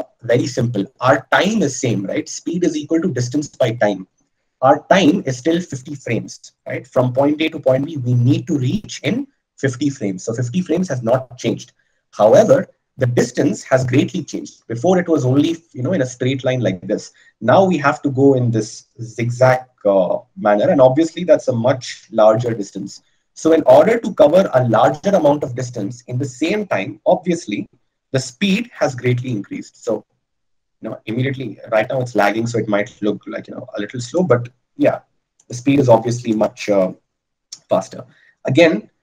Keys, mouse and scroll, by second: 30.3-31.6 drag.